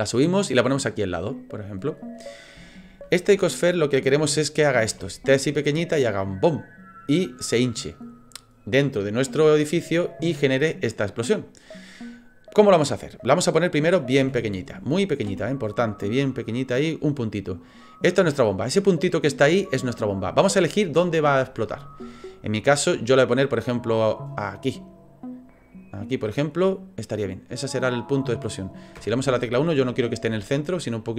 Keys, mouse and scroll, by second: 0.5 click, 1.4 middle click, 2.7 shift+middle click, 3.2-3.6 scroll up 3, 3.6 middle click, 4.9 s, 14.2 s, 15.2 s, 17.7 click, 22.0 middle click, 23.6 click, 26.3 middle click, 29.0 KP_1, 30.9 click.